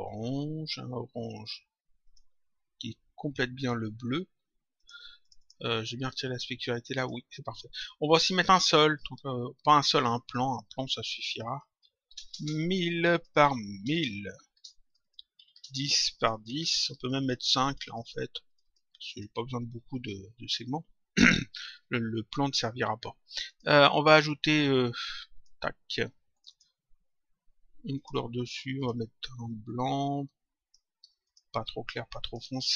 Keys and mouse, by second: 1.9 click, 3.5 click, 4.7 click, 6.9 click, 9.0 click, 11.2 click, 12.9 click, 14.8 click, 16.1 click, 23.2 click, 26.2 click, 27.9 click, 31.1 click.